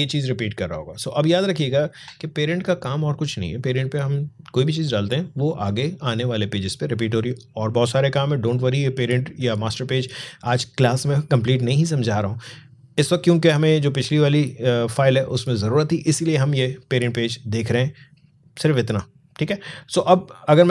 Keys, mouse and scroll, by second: 0.7-1.2 alt+scroll down 1.